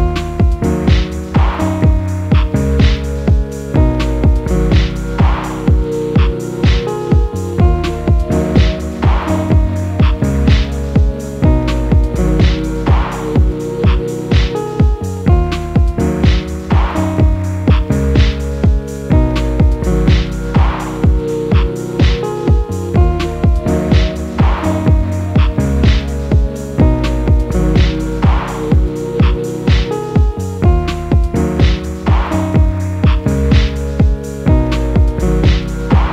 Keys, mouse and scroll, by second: 0.0-0.1 typing, 3.2 ctrl+], 3.6 ctrl+], 3.8 ctrl+], 4.3 space, 7.7 ctrl+[, 9.5 right click, 17.2 right click, 23.4 space, 29.6 ctrl+-, 30.0 ctrl+-, 30.2 ctrl+-, 31.7 typing, 35.0 ctrl+m.